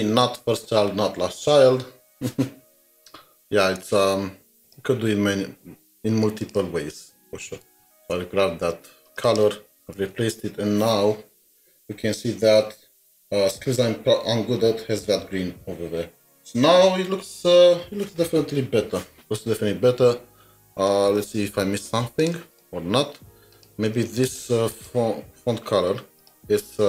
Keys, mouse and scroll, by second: 3.7 2, 3.8 alt+Tab, 7.7 ctrl+c, 8.0 alt+Tab, 9.2 double click, 9.7 typing, 14.9 typing, 24.2 double click, 24.7 double click.